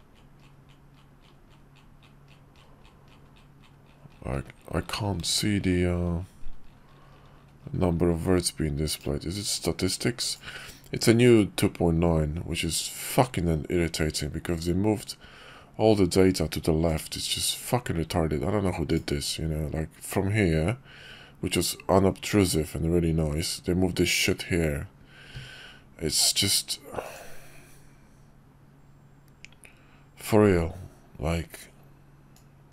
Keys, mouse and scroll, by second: 10.2-11.4 drag, 16.9-19.4 drag, 27.1-30.8 drag, 32.3-32.7 drag.